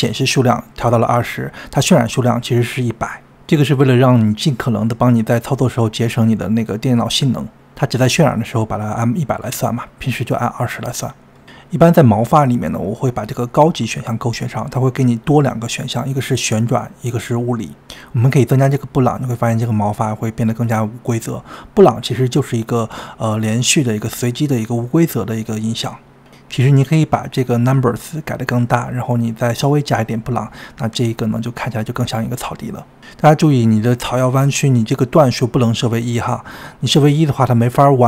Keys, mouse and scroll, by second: 15.3-16.4 drag, 31.2-38.0 drag.